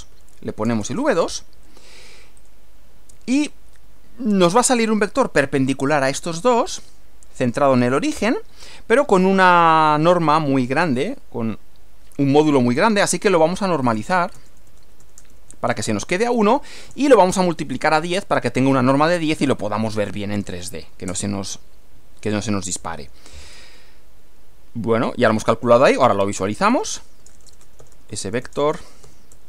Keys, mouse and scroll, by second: 0.0-1.7 typing, 2.4 click, 9.6 click, 13.6-15.5 typing, 16.8-18.3 typing, 21.1 Return, 26.3-29.4 typing.